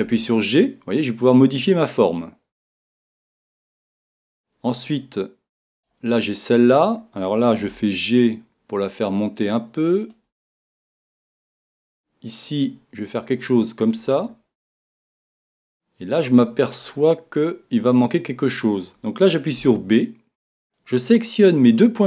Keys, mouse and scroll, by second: 0.0-1.5 right drag, 0.0 g, 3.3 click, 7.6 g, 11.6 click, 11.6-13.1 right drag, 11.6 g, 13.9 click, 19.6 b.